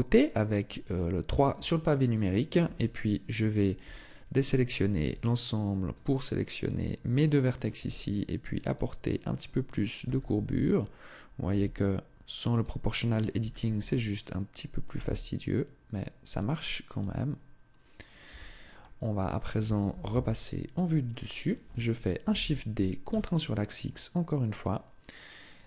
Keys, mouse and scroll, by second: 0.8 shift+middle click, 1.6-2.4 scroll up 1, 2.4 Tab, 2.4-2.7 scroll up 1, 3.6 a, 4.7 b, 7.5 g, 8.5 click, 9.8 a, 10.2 b, 11.2 g, 12.4 click, 13.1 a, 13.5 b, 14.7 g, 18.0 click, 18.0 Tab, 18.6 middle click, 19.6 KP_7, 20.7 shift+middle click, 22.0 shift+d, 24.4 click, 25.5 Tab.